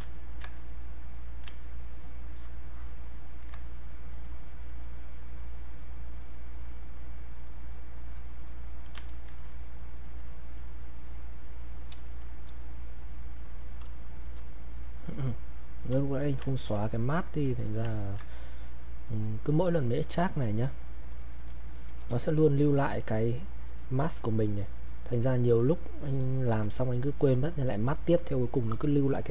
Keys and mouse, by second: 0.1 ctrl+right click, 0.6-1.8 ctrl+drag, 1.8-10.2 ctrl+drag, 12.0 space, 12.2 click, 14.5 click, 16.5 ctrl+right click, 16.8 ctrl+click, 17.6 alt+click, 18.0 ctrl+right click, 18.3 click, 21.2 click, 21.5 alt+click, 25.6 click.